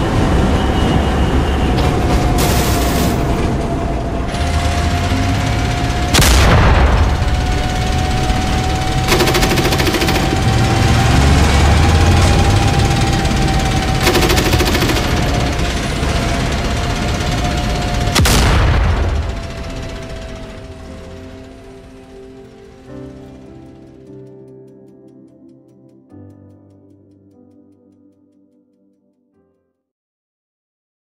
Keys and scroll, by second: 0.0 a, 4.3 w, 10.3 w, 11.5 a, 15.4 q, 15.9 a, 16.7 d, 20.4 w, 20.7 d, 21.9-22.8 typing.